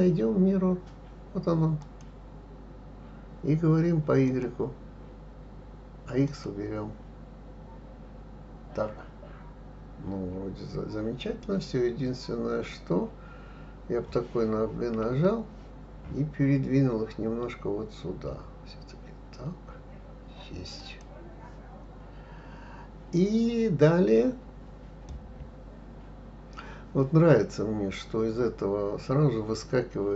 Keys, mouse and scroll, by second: 4.2 click, 6.2 click, 15.0 g, 25.1-28.1 middle drag.